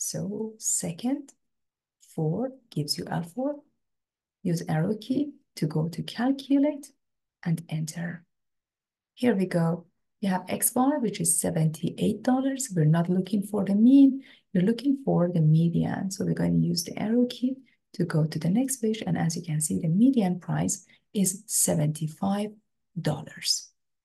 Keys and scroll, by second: 2.1 4, 5.0 Down, 6.1 Down, 8.4 Return, 16.0 Down, 17.0 Down, 17.9 Down.